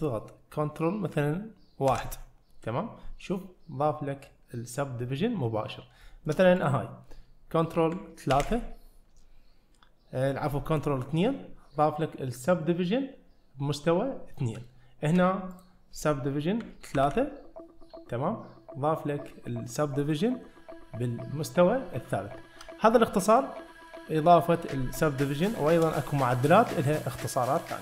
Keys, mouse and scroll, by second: 2.0 ctrl+1, 6.1 shift+middle click, 6.6 click, 8.4 ctrl+2, 14.7-15.1 shift+middle drag, 15.6 click, 17.0 ctrl+3, 22.2-22.7 shift+middle drag, 25.6 shift+middle click.